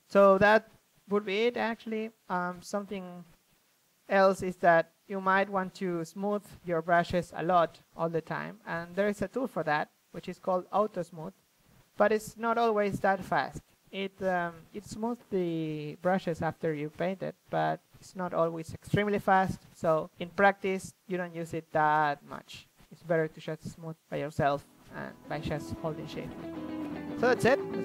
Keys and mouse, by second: 0.0-1.7 drag, 2.2-6.2 drag, 6.4-11.5 drag, 11.5 middle drag, 11.8-13.1 drag, 13.1-13.5 middle drag, 13.5-15.0 drag, 15.2-18.8 drag, 15.5 ctrl+z, 17.0 f, 19.6-21.0 drag, 19.9 f, 21.0-21.5 middle drag, 21.9 middle drag, 22.2-22.9 drag, 22.9 ctrl+z, 24.5 drag, 25.4 middle drag, 25.6-26.7 drag, 26.7 middle drag, 26.9-27.4 middle drag, 27.4 s, 27.6 click.